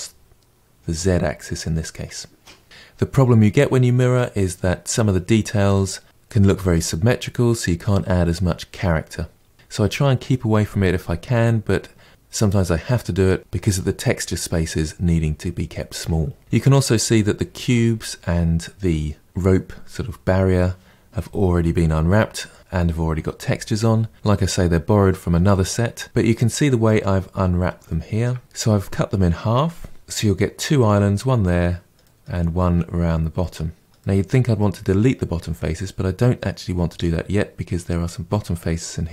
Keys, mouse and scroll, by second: 2.6-5.5 scroll down 5, 10.7-11.3 scroll down 2, 11.3-13.4 middle drag, 16.4-18.7 shift+middle drag, 26.2 shift+middle click, 27.1-27.8 scroll up 2, 27.8 shift+middle click, 30.0-33.3 middle drag, 33.3-34.0 scroll down 1, 34.0-38.7 middle drag.